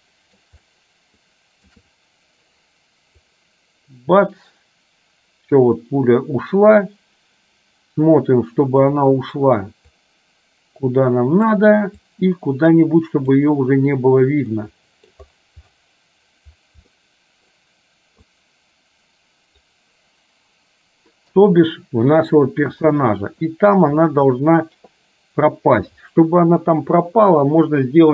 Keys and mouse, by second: 0.8-1.8 shift+middle drag, 3.6-9.1 drag, 10.2-11.6 drag, 12.2-13.6 drag, 14.7 middle click, 16.9 middle click, 18.4-19.7 drag, 23.1 middle click.